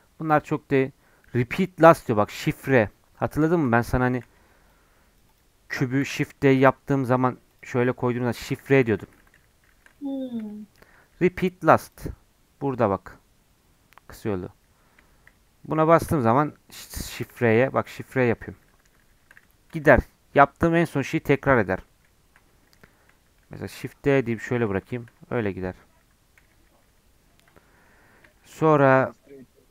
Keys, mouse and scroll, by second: 4.0 shift+a, 6.0 shift+d, 8.4-9.2 shift+r, 9.3 shift+r, 9.5 shift+r, 9.7 shift+r, 9.9 middle click, 10.8 shift+r, 10.9 shift+r, 11.8-14.8 drag, 15.3-16.0 shift+r, 17.5-18.9 shift+r, 19.8 ctrl+z, 20.1-22.0 ctrl+z, 23.4 shift+d, 24.5-25.0 shift+r, 25.2 scroll down 1, 25.3-26.4 middle drag, 26.4-27.2 ctrl+z, 27.5 middle click, 27.9 scroll up 2, 28.3-29.7 shift+middle drag.